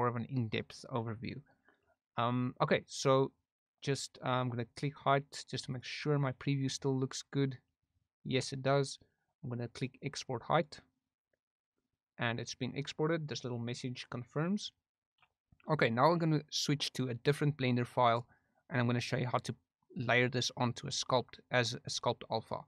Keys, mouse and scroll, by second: 6.4 click, 10.5 click.